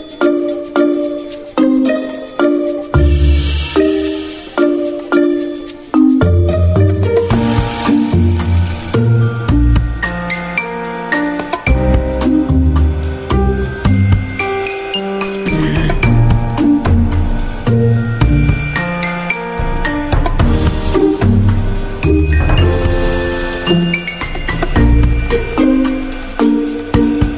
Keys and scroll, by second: 6.6 g, 18.8 z, 25.3 x.